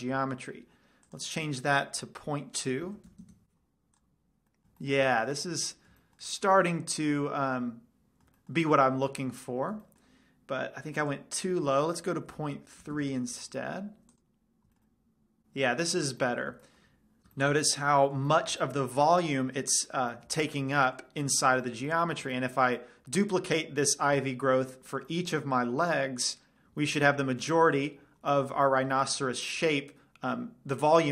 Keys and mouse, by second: 0.2-2.2 middle drag, 1.4 click, 4.4-5.2 drag, 4.7 middle drag, 5.2 middle drag, 6.7-7.4 middle drag, 7.8-8.2 middle drag, 9.0 middle click, 9.2 middle click, 9.4-10.2 middle drag, 11.3 click, 15.0 middle drag, 15.2 middle click, 15.4 middle click, 15.9 middle click, 16.1 middle click, 16.6 middle click, 16.8 middle click, 20.8-23.6 middle drag, 25.4-26.7 middle drag, 27.1 middle drag, 27.4-27.7 middle drag.